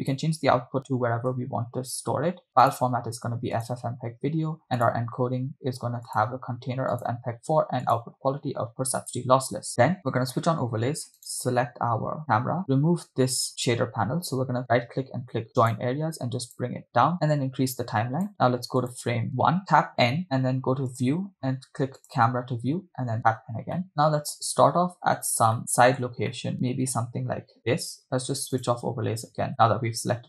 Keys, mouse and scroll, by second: 0.0-1.6 drag, 0.9 /, 2.3 scroll down 2, 3.1-4.0 drag, 4.5 scroll down 1, 4.9 drag, 5.1-6.0 scroll down 1, 6.0 scroll down 1, 6.2-7.5 drag, 8.0-10.3 drag, 11.6 right click, 13.5-16.7 drag, 13.5 right click, 17.7 click, 19.5 click, 19.5 Right, 20.8 n, 20.9-21.8 drag, 22.0 click, 23.0 n, 23.9 middle click, 25.6 shift+middle click, 26.5 middle click, 28.7 click, 29.5-30.2 shift+middle drag.